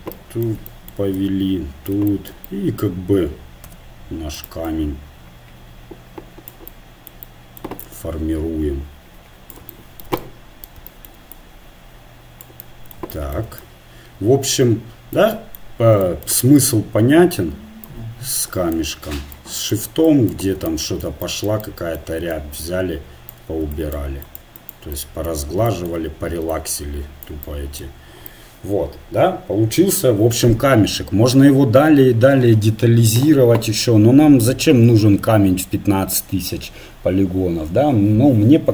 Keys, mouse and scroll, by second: 1.2-3.4 drag, 3.7 f, 4.7-6.6 drag, 7.8-9.8 drag, 11.3-15.3 drag, 18.1-21.0 drag, 21.0-22.1 right drag, 21.7 click, 22.3 click, 22.5-24.7 right drag, 24.9-28.3 drag, 24.9 right click, 31.1-33.5 middle drag.